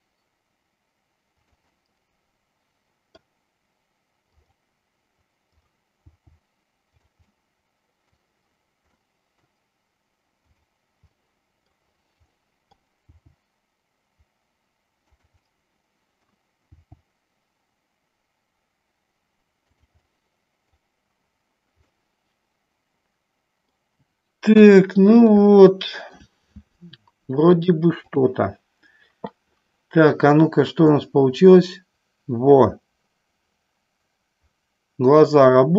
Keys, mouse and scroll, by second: 1.5 click, 1.8-3.4 middle drag, 4.4 click, 5.6 click, 7.4 middle click, 9.0 middle click, 10.4 click, 11.1 middle click, 12.3 middle click, 15.3 click, 15.6 middle click, 16.9 g, 20.1 middle click, 21.9-23.9 middle drag, 24.6 KP_1, 25.5 shift+middle click, 27.7 click, 31.0-35.7 drag.